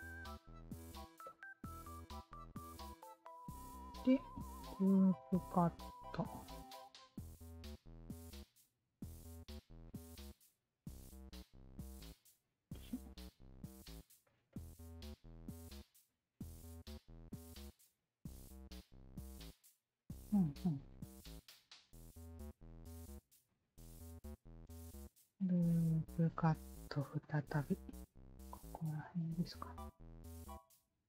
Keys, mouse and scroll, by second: 0.9 w, 1.2 alt+click, 2.0 alt+click, 2.9 alt+click, 4.0 shift+q, 5.1 alt+click, 6.0-8.0 alt+drag, 8.9 shift+q, 9.2 click, 9.8-11.1 alt+drag, 11.4 w, 12.0 alt+click, 12.9 alt+click, 13.6 alt+click, 14.2 alt+click, 14.5-16.6 alt+drag, 18.1 alt+click, 22.6 alt+click, 23.3 alt+click, 23.8 alt+middle click, 24.2 alt+right click, 26.0 shift+q, 26.8 click, 27.7-29.1 drag, 30.2-31.0 drag.